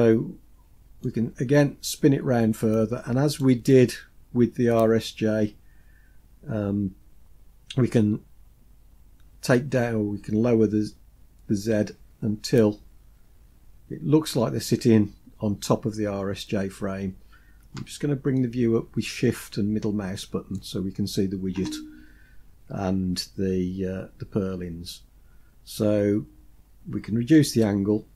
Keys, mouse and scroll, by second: 1.0-3.5 drag, 8.0-14.3 drag, 18.4-20.6 shift+middle drag, 27.4-28.1 drag.